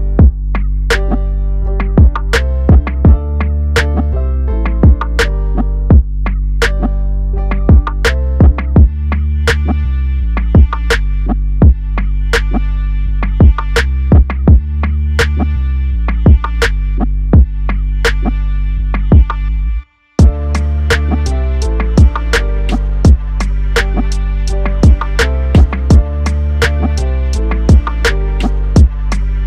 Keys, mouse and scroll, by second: 2.0 click, 3.5 g, 4.1 x, 7.4 click, 8.7 i, 10.2 click, 14.0-15.3 drag, 16.0-19.1 drag, 28.3 click.